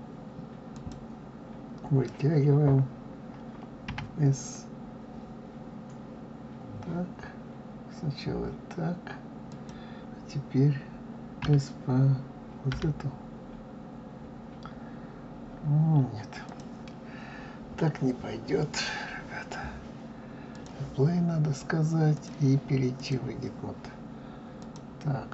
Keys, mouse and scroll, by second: 3.9 s, 11.4 s, 20.5 click, 22.1-24.7 drag.